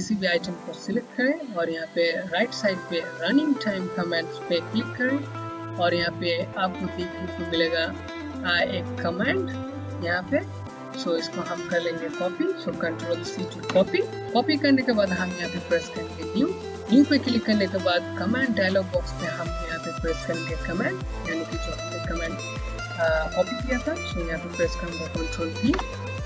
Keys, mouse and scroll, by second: 4.2 click, 8.7 click, 13.5 c, 16.1 click, 25.5 v.